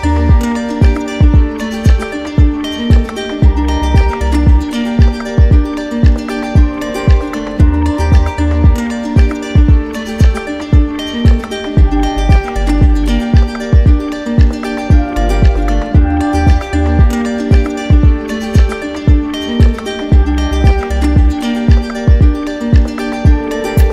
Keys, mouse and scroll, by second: 0.3 click, 1.6 ctrl+z, 2.2 ctrl+z, 3.2 click, 3.8 click, 4.3 alt+click, 7.9 right click, 9.4-10.5 drag, 13.3 click, 15.2 click, 18.9-19.9 drag.